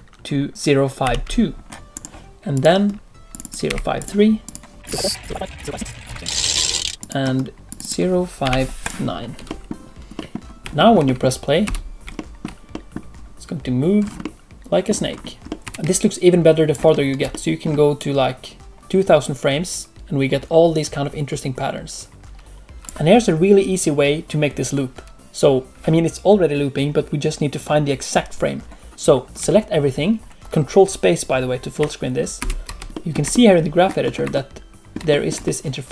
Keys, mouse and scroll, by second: 2.5 click, 3.3 click, 4.4 click, 4.8 click, 5.0 click, 5.2 click, 5.4 click, 5.5 click, 5.8 click, 6.0 click, 6.3 click, 6.5 click, 6.9 click, 7.6 click, 9.4 middle click, 10.1 middle click, 10.4 scroll down 1, 10.7 shift+middle click, 11.0 middle click, 11.6 space, 12.1 shift+middle click, 12.7 middle click, 13.9-14.4 scroll down 3, 14.2 middle click, 15.0-15.7 scroll up 3, 15.4 middle click, 16.9 ctrl+middle click, 17.9 click, 29.3 a, 30.4 ctrl+middle click.